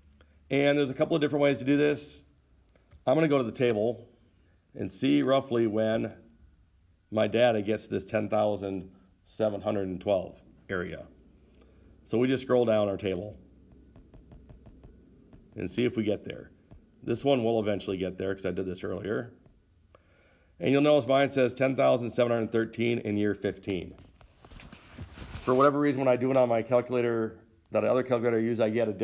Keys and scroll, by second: 14.1 Down, 14.3 Down, 14.5 Down, 14.7 Down, 14.8 Down, 15.2 Down, 15.7 Down, 16.9 Down, 17.0 Down, 17.5 Down, 17.8 Down, 19.3 Down, 19.7 Down.